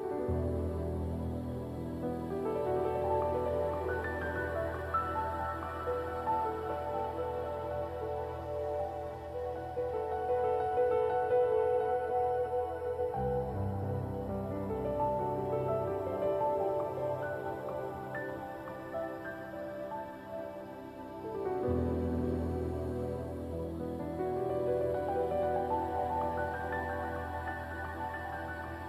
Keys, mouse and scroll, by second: 0.8 scroll down 1, 7.1 alt+click, 12.2 alt+right click, 12.5 alt+click, 13.7 alt+right click, 14.7 alt+right click, 14.9 alt+click, 15.7 scroll down 1, 17.1 shift+click, 18.2 alt+click, 24.7-26.3 scroll up 1, 26.3 scroll down 1, 26.6 alt+click, 27.2 alt+right click, 27.8 alt+click, 28.2 alt+middle click.